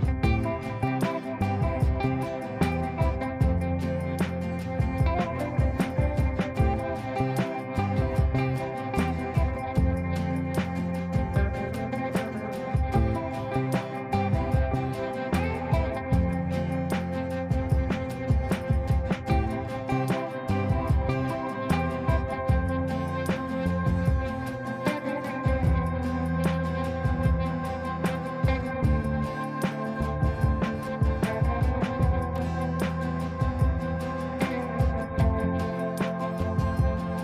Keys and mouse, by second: 5.0 click, 7.5 click, 9.3 Right, 12.6 ctrl+space, 13.2 shift+click, 14.2 shift+click, 14.7 c, 15.4 shift+click, 16.3 right click, 19.0 click, 23.0-26.2 drag, 27.3 ctrl+u, 27.9 click, 28.5 F2, 29.0-30.6 drag.